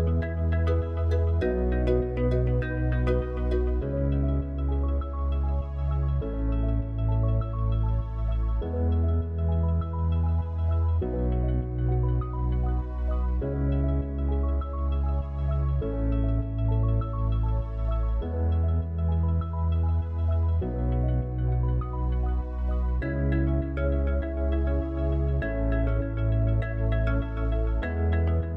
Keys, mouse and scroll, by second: 0.0 click, 3.3 click, 6.8-13.4 drag, 13.4 KP_0, 15.4-20.8 drag, 25.6-28.4 drag, 28.4 g.